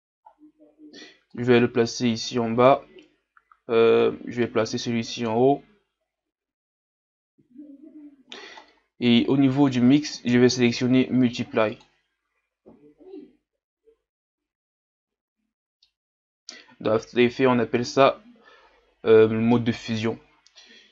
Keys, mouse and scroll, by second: 2.8 click, 4.0-7.4 drag, 12.0-15.1 drag, 15.1-15.8 scroll down 2, 15.8 scroll down 1, 15.9-17.6 middle drag.